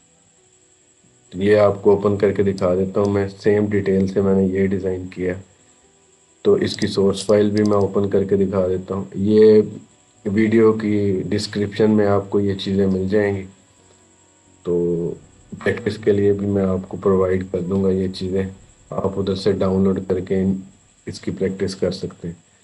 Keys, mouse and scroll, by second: 1.3 scroll up 1, 2.4-4.3 drag, 4.3-6.5 scroll down 1, 6.5 click, 21.7-22.4 scroll down 1, 22.4 scroll up 1.